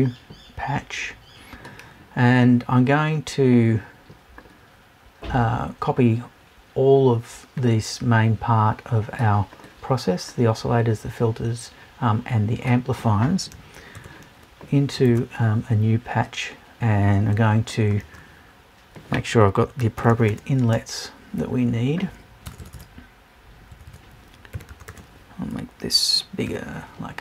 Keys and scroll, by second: 22.4 BackSpace.